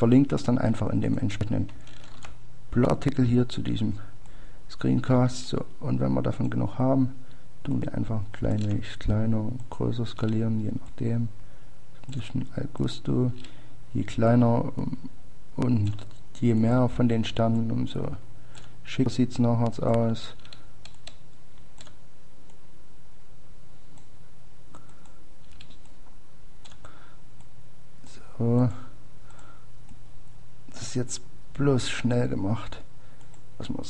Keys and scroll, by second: 0.0 ctrl+d, 5.8 ctrl+d.